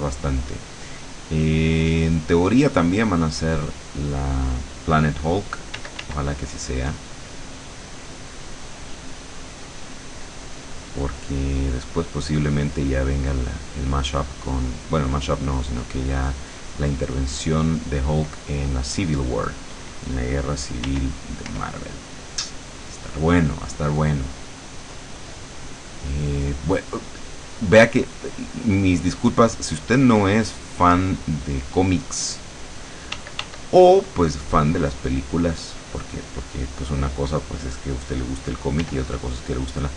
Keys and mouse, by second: 1.2 click, 2.2 click, 3.9 click, 5.8 d, 6.5-13.0 drag, 13.4-17.9 drag, 21.0 r, 23.0 click, 24.5 click, 25.6 click, 27.0 click, 28.0-29.2 drag, 29.5-32.4 drag, 33.3 d, 33.8-35.7 drag, 39.0 r.